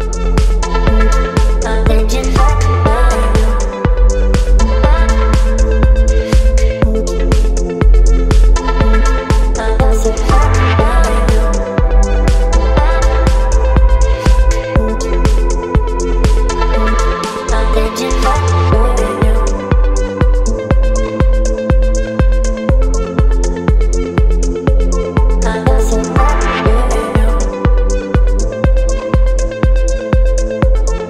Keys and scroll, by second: 2.6 Return, 4.4 ctrl+t, 8.5 Return, 10.4 ctrl+g, 15.2 ctrl+t, 16.6 Return, 20.7 space.